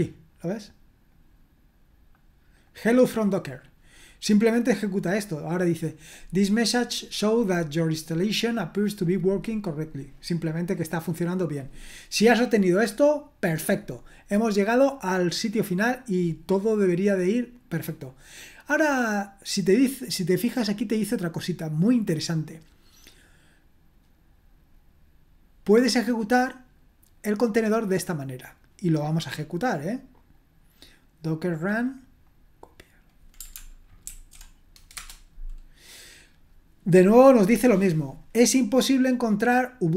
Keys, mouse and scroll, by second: 1.1-2.2 drag, 2.6 click, 2.8 click, 9.7-17.0 scroll down 2, 17.0 scroll down 1, 28.3 click, 29.1 click, 29.7 click, 30.4-32.0 drag, 32.3 middle click, 34.1 ctrl+alt+v, 34.9 Return.